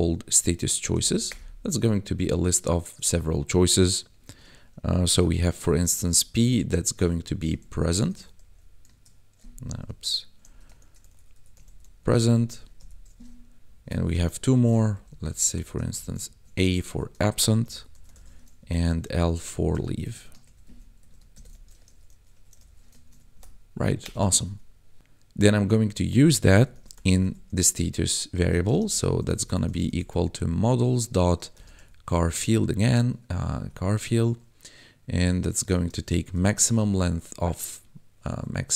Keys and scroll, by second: 0.9 [, 1.2 Return, 4.3 shift+9, 4.9 ', 5.2 shift+p, 5.8 Right, 6.4-8.4 typing, 9.4 Left, 10.7-12.7 typing, 12.3 Right, 13.6 alt+shift+Down, 14.2 ctrl+s, 14.4 Up, 14.5 Left, 15.5 shift+Left, 15.8 shift+a, 16.2 ctrl+Right, 16.8 ctrl+shift+Right, 17.2-18.1 typing, 18.5 Down, 18.9 ctrl+Left, 19.4 shift+Left, 19.8 shift+l, 20.4 Right, 21.3 ctrl+shift+Right, 21.8 shift+l, 22.0 e, 22.3 a, 22.5 e, 23.0 ctrl+s, 23.3 Down, 24.0 Return, 24.3 ctrl+s, 26.2-27.1 typing, 28.5-30.1 typing, 31.5 shift+c, 31.7 h, 33.4 Down, 33.7 Tab, 35.6 shift+9, 36.3 m, 36.4 a.